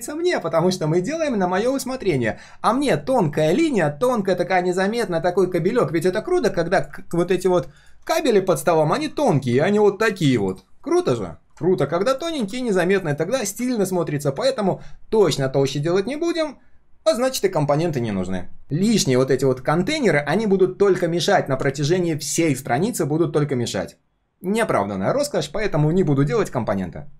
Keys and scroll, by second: 3.0 ctrl+shift+4, 3.5 ctrl+shift+4, 11.7 ctrl+z, 12.3 ctrl+z.